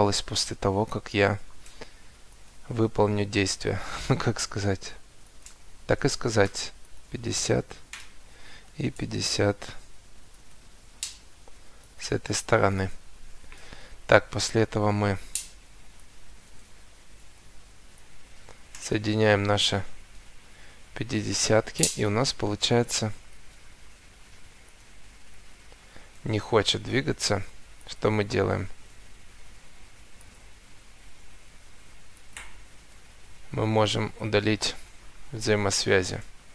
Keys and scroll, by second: 14.3 Escape, 25.8 Escape, 29.3 Escape, 32.9 Escape, 35.5 Delete.